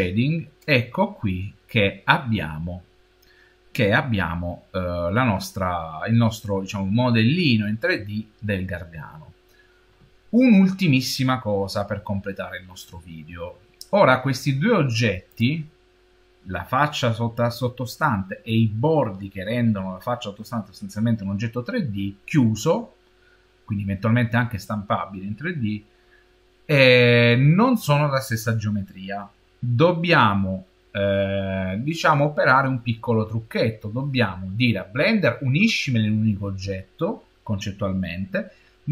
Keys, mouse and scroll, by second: 0.3 middle click, 0.9 middle click, 3.6-7.3 middle drag, 15.1 click.